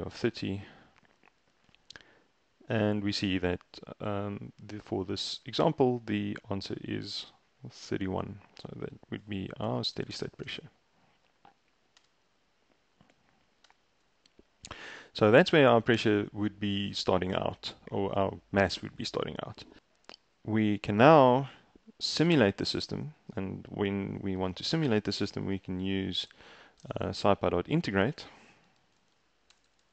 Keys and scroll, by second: 0.2 shift+Return, 9.1 ctrl+a, 9.5-12.5 typing, 13.7 Return, 26.0-29.9 typing.